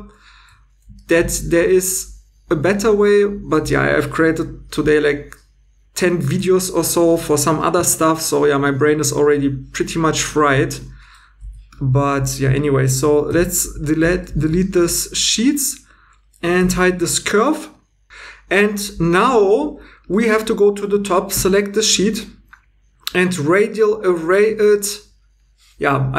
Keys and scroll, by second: 10.6 Tab, 11.4 x, 14.3 2, 16.6 h, 21.3 Tab.